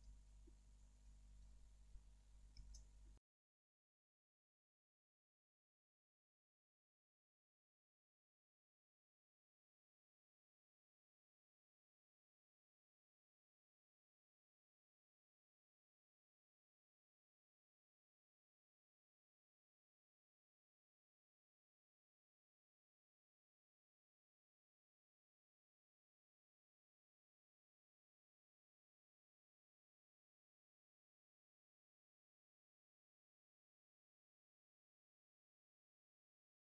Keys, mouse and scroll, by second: 2.6 alt+h, 3.5 middle click, 3.5 scroll up 1, 4.4 q, 4.7 middle click, 4.9 alt+middle click, 5.5 scroll down 1, 5.7 middle click, 5.8 alt+middle click, 6.7 scroll up 1, 6.8 Tab, 6.9 middle click, 7.0 scroll down 1, 7.2 Tab, 7.4 alt+middle click, 7.5 middle click, 7.7-8.2 scroll up 2, 7.8 Tab, 7.9 middle click, 8.2 Tab, 8.9 scroll down 1, 9.1 alt+middle click, 9.3 Tab, 9.7-19.2 alt+middle drag, 10.0 scroll down 1, 10.8 scroll up 1, 12.5 ctrl+`, 18.6 scroll up 1, 18.7 Tab, 19.2 click, 19.4 2, 19.5 click, 20.0 q, 20.1 Tab, 20.3-20.7 scroll down 2, 20.4-31.4 alt+middle drag, 20.9 scroll up 1, 21.5 alt+q, 28.2-28.6 scroll up 2, 28.6-28.9 scroll down 2, 28.9 scroll up 2, 29.2 scroll down 2, 30.1 scroll up 2, 30.4 scroll down 2, 31.1 scroll up 2, 31.4 click, 31.5 alt+q, 31.7-36.7 alt+middle drag, 31.8 scroll up 2, 31.9 Tab, 34.2 shift+d, 34.9 Escape, 36.0 alt+q.